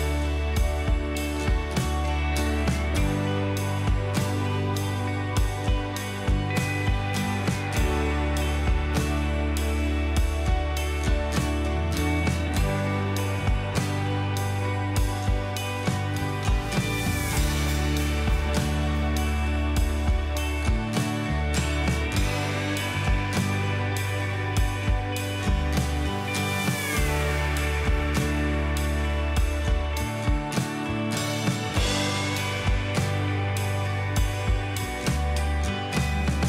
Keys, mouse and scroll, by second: 6.7 double click, 7.3 Return, 9.8 Return, 10.9 right click, 13.8 typing, 15.6 typing, 16.8 typing, 20.0 typing, 25.9 alt+click, 26.8 Return, 27.7 alt+click, 30.7 space.